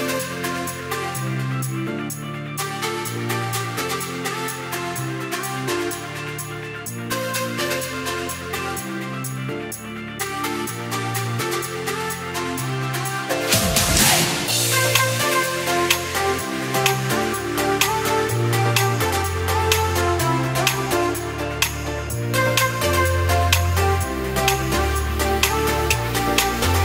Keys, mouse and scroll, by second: 4.2 s, 8.1 alt+click, 9.6 alt+shift+click, 10.5 s, 14.6 alt+click, 15.2 s, 19.6 alt+click, 21.1 s, 24.6 alt+click, 25.0 s.